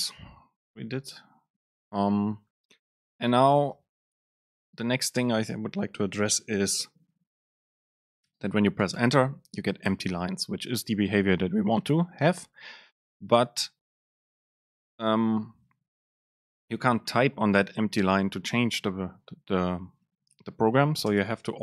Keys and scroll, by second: 0.7 shift+Left, 1.0 Right, 1.7 Return, 9.0 Return, 21.3 super+space.